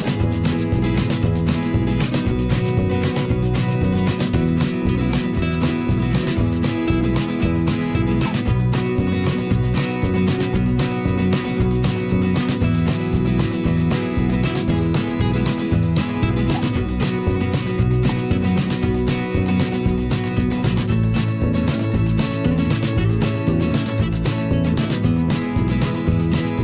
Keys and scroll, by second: 7.8 ctrl+shift+[, 8.4 Right, 9.9 ctrl+a, 11.2 m, 12.5 i, 12.9 v, 14.0 ctrl+a, 14.3 7, 14.3 0, 14.4 Return, 14.9 ctrl+shift+[, 15.1 ctrl+], 19.0 ctrl+a, 19.1 5, 19.2 Return, 20.6 ctrl+a.